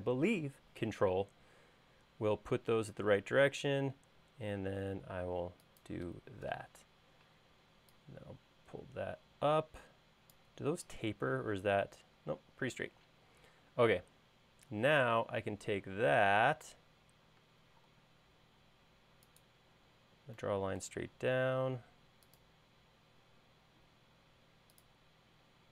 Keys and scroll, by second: 6.6 p, 17.6 space, 17.9 l.